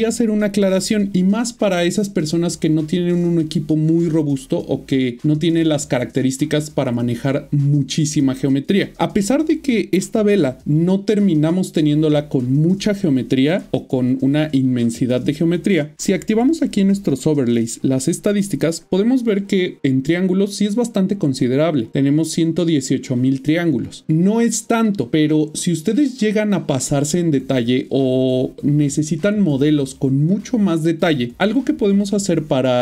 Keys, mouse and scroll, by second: 15.9 click.